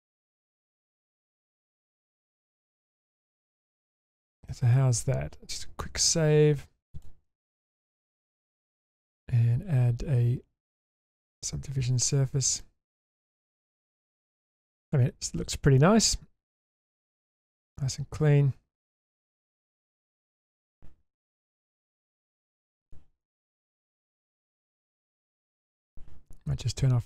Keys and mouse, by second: 0.0-1.1 middle drag, 1.4-2.4 middle drag, 2.9 middle click, 3.9 Tab, 4.5 middle click, 5.8 ctrl+s, 9.2-12.2 drag, 12.6 middle click, 13.6 shift+space, 14.2-14.9 middle drag, 15.8-17.5 middle drag, 17.8 Tab, 18.7 Tab, 19.0-19.5 middle drag, 19.8 shift+space, 20.2-20.6 shift+middle drag, 22.5 click, 22.8 click, 23.2 middle click, 23.6 Tab, 24.0-24.7 middle drag, 25.0-25.3 shift+middle drag.